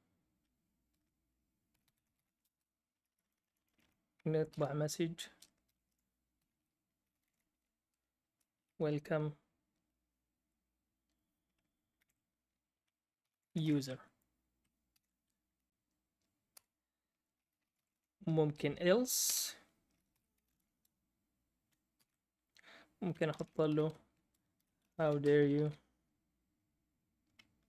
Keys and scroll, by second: 0.6-3.3 typing, 5.4-8.2 typing, 12.0-14.9 typing, 16.5 Return, 17.3-18.3 typing, 19.2 Return, 19.8-26.0 typing.